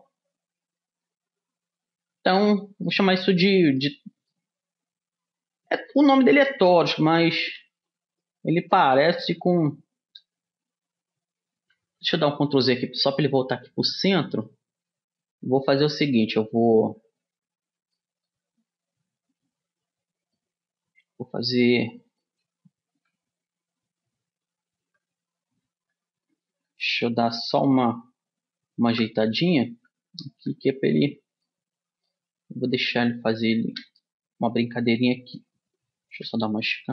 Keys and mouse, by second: 1.2-3.2 middle drag, 3.2-6.5 middle drag, 7.8 g, 9.5-11.4 middle drag, 12.0 ctrl+z, 12.4 ctrl+z, 12.7 ctrl+z, 13.1 ctrl+z, 16.3 middle click, 16.6-18.3 drag, 18.3 middle click, 19.8 middle click, 22.1-24.5 middle drag, 22.8 r, 28.0 r, 31.8-35.2 middle drag, 36.5 s.